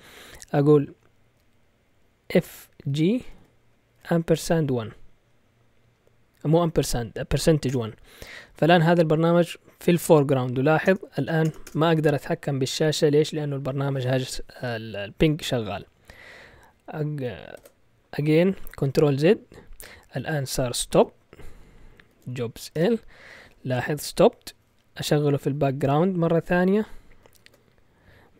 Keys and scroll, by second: 2.6-4.4 typing, 7.6 Return, 10.8 Return, 11.2 Return, 11.4 Return, 11.7 Return, 17.5 ctrl+z, 20.4-23.1 typing, 25.3-26.0 typing, 27.4 ctrl+l.